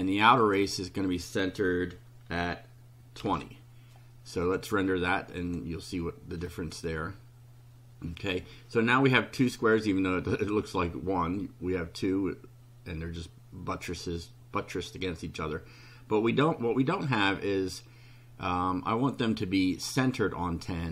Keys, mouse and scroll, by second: 0.4 click, 3.2 2, 4.4 click, 5.4 click.